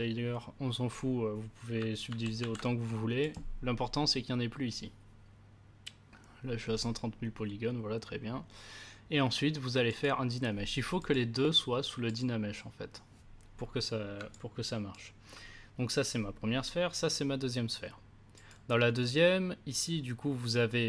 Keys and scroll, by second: 2.0 ctrl+d.